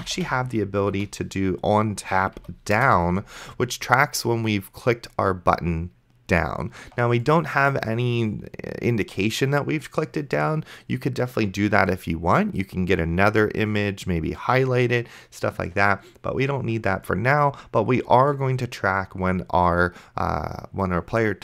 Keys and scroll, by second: 0.0-0.9 typing, 2.4 Down, 2.8 Return.